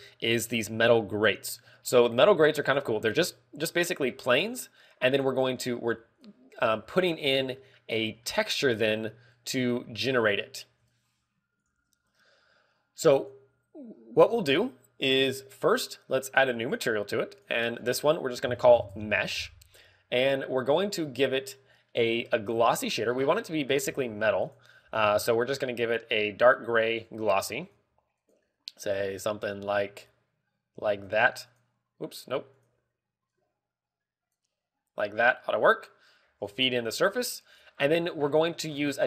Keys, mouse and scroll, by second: 0.5 right click, 11.6 click, 14.0 click, 14.8 click, 14.8 scroll down 2, 15.7 scroll down 2, 17.5 click, 18.2 click, 23.7 click, 24.3 middle click, 24.7 scroll up 1, 25.4 click, 25.4 scroll up 1, 25.7 x, 26.0 shift+a, 28.1 g, 28.6 click, 29.0 click, 33.4 click, 36.1 click, 36.6 click, 38.7 middle click.